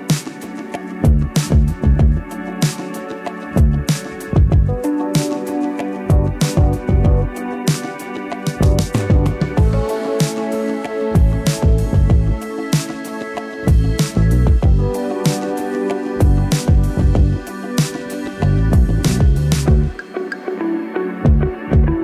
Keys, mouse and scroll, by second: 1.3-4.0 drag, 9.7-11.9 drag, 13.3 c, 14.0 click, 16.7-17.5 typing, 17.9 Return, 20.2 click.